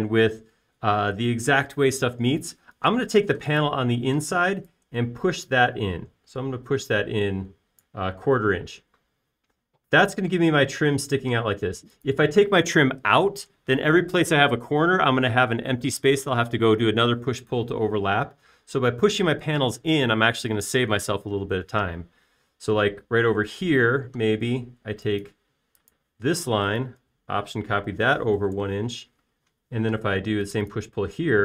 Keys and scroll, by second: 5.7 p, 10.8 space, 12.0 e, 24.9 space, 27.8 m, 29.9 1, 30.1 Return, 31.3 p.